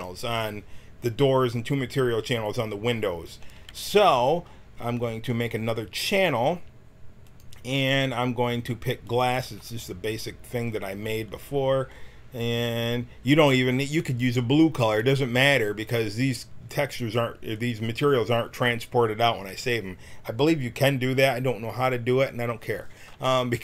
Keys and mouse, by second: 6.2-15.7 drag.